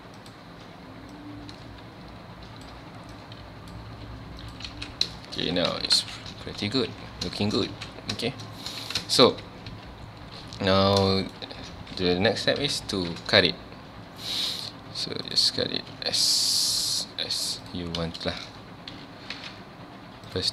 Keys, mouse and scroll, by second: 0.2 click, 1.1-3.2 drag, 3.9 g, 4.5 click, 4.7 alt+a, 5.2 shift+middle click, 5.4 z, 5.7 Tab, 6.0 alt+a, 6.2 scroll down 1, 6.4 ctrl+s, 6.6 scroll up 1, 6.9 z, 7.4 shift+middle drag, 7.7 ctrl+s, 7.9 scroll down 1, 8.2-8.8 shift+middle drag, 8.8 ctrl+s, 9.0 scroll down 2, 9.0 shift+middle drag, 9.3 scroll up 2, 9.7 Tab, 10.5 scroll up 2, 11.1 shift+middle click, 11.8 ctrl+s, 18.1 space, 18.9 c.